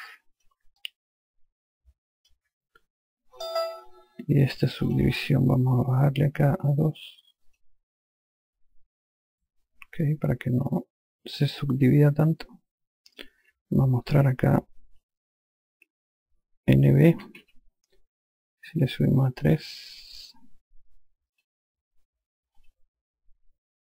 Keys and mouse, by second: 1.2 alt+click, 5.2 click, 7.8 click, 10.4 alt+click, 17.4-18.3 typing, 19.8 click, 21.7 click, 23.0 click.